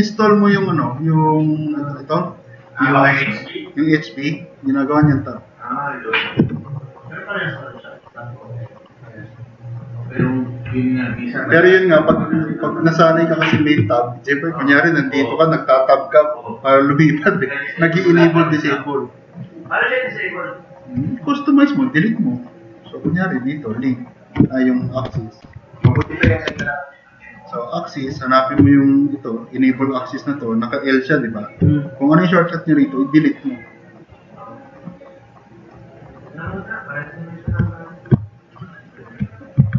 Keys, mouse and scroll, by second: 15.1 click, 25.1-27.0 typing, 37.5 4.